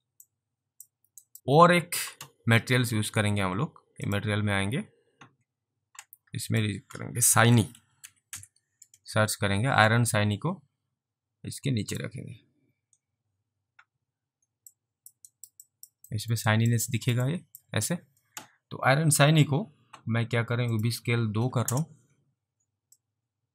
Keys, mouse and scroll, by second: 0.3 click, 1.3 alt+right click, 4.1 click, 6.5 click, 7.3-8.8 typing, 9.9 click, 14.8 alt+click, 15.4 alt+right click, 15.7 alt+click, 16.1 alt+middle click, 16.6 alt+right click, 16.9 alt+click, 17.3 alt+click, 20.8 click, 21.4 click, 21.7 Return, 22.9 alt+Return, 23.1 alt+click.